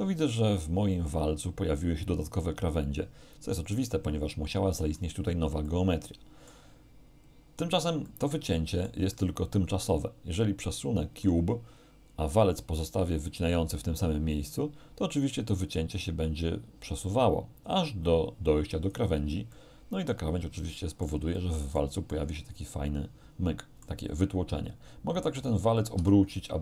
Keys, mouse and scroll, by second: 5.7-6.7 middle drag, 8.1-9.1 middle drag, 10.1-11.5 middle drag, 14.6-19.1 drag, 19.2 z, 19.6-21.3 middle drag, 21.4 middle click, 22.1-24.1 middle drag, 25.4 right click, 26.0 r.